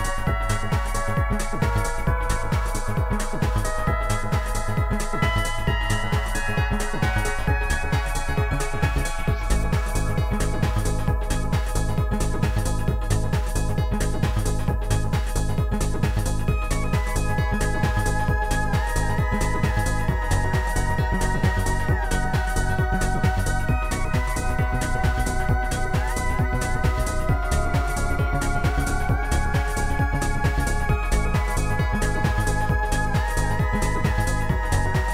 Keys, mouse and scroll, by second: 1.1 click, 1.9 click, 2.3 click, 3.8 click, 4.7 click, 5.8 click, 7.1 Delete, 7.6 Delete, 7.6 click, 10.1 Delete, 10.3 Delete, 10.8 click, 11.4 click, 13.0 click, 14.9 click, 16.4 click, 18.3 click, 18.7 shift+click, 20.6 Delete, 20.6 shift+click, 21.9 shift+click, 24.3 click, 24.7 click, 25.4 click, 26.8 click, 27.2 click, 28.7 click, 30.8 click, 30.9 ctrl+click, 31.4 ctrl+click, 31.5 ctrl+click, 32.1 ctrl+click, 33.9 ctrl+click, 34.3 ctrl+click, 34.7 ctrl+click.